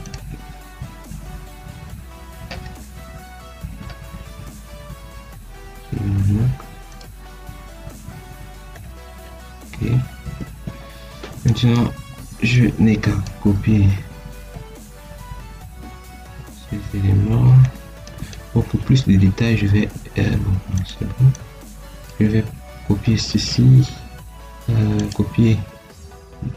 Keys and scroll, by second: 10.3 Escape, 16.0 Escape, 19.9 Escape.